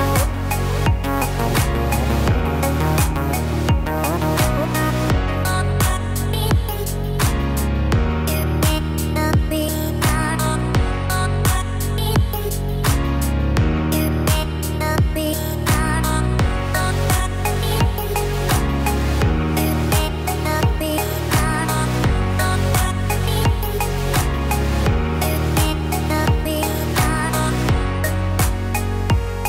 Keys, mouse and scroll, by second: 0.1 Tab, 0.4 click, 0.8-1.3 scroll down 3, 1.1 middle click, 1.9-2.6 scroll up 2, 2.6 middle click, 5.3 click, 5.9 Tab, 6.3-7.8 scroll up 4, 7.8 middle click, 7.8 scroll up 1, 10.6 click, 11.5 shift+click, 14.6 g, 18.2 Escape, 19.0 click, 20.1 shift+click, 21.7 click, 22.4 g, 24.8 ctrl+z, 25.4 ctrl+z, 26.3 ctrl+z, 28.4 ctrl+z, 29.1 ctrl+z.